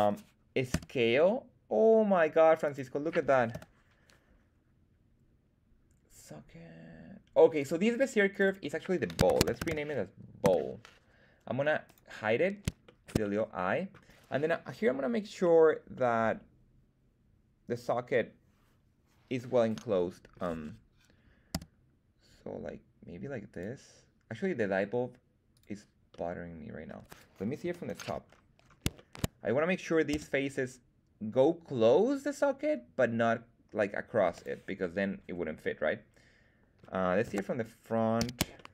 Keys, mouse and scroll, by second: 0.6 s, 2.6 click, 3.4 /, 7.5 click, 8.2 click, 8.4-11.0 drag, 11.8 click, 12.8 shift+middle click, 13.1 middle click, 15.9-20.4 middle drag, 21.5 s, 23.4 click, 25.5 click, 26.0 middle click, 27.6 KP_7, 28.2-28.9 scroll up 4, 28.9 shift+middle click, 30.0 s, 34.2 click, 34.7-36.9 middle drag, 37.2 KP_1, 38.1 z, 38.5 shift+middle click.